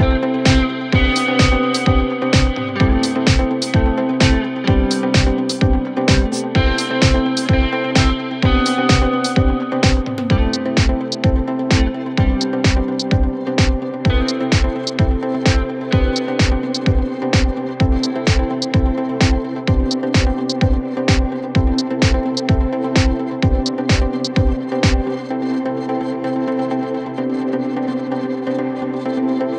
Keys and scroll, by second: 1.7 shift+Page_Down, 2.3 w, 5.9 Delete, 10.9 c, 11.4 Escape, 13.2 w, 13.6 d, 14.4 shift+Page_Down, 14.6 ctrl+Page_Up, 15.4 ctrl+Page_Down, 15.8 f, 22.0-24.6 typing, 27.8 ctrl+k, 29.1 c.